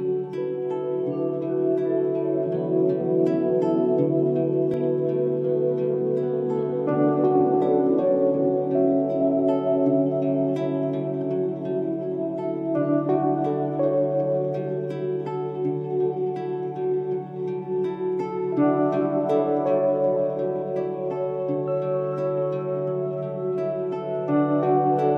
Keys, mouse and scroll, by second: 0.0 click, 6.5 click, 8.2-15.3 drag, 13.5 click, 15.3 click, 15.8 alt+scroll up 1, 16.6 alt+click, 23.2 alt+scroll down 2, 23.9 space, 24.0 click, 24.0-24.4 click, 24.8 alt+scroll up 1.